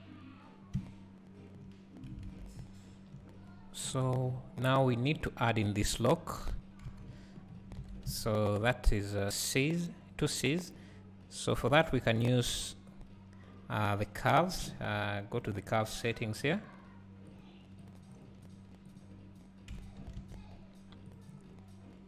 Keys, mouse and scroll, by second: 1.9 scroll down 1, 6.5 click, 6.9 KP_1, 7.5 scroll up 1, 7.8 alt+a, 15.4 click, 18.5 click.